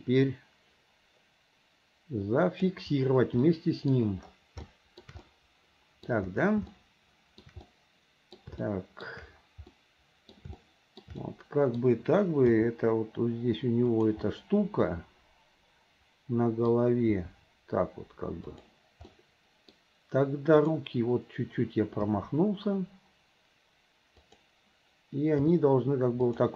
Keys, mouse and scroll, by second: 0.7 g, 3.4-3.9 middle drag, 4.7 shift+scroll up 1, 4.8 shift+middle drag, 5.2-6.1 middle drag, 6.1 scroll down 1, 6.7-7.5 shift+middle drag, 7.7-8.5 middle drag, 8.7 shift+middle click, 9.7-10.4 middle drag, 10.6-11.1 shift+middle drag, 11.2-11.8 middle drag, 13.2 g, 14.3-16.7 middle drag, 14.3 scroll up 1, 17.2 g, 19.2-19.9 middle drag, 19.2-19.8 scroll up 1, 19.8 scroll down 1, 20.6 click, 22.3 g, 25.5 r.